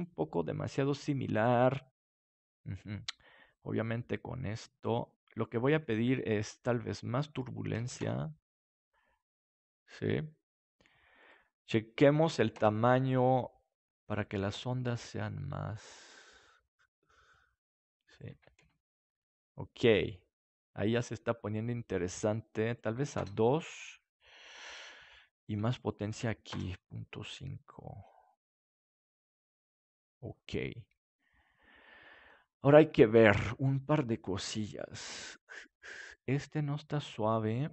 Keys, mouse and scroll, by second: 7.3-9.0 drag, 11.1-14.0 drag, 14.1-15.7 drag, 18.0-19.9 drag, 19.5-22.0 middle drag, 22.6-24.6 drag, 24.7-27.6 drag, 27.2-28.9 middle drag, 27.2 right click, 32.6-35.9 middle drag, 35.9 click, 35.9-37.7 right drag.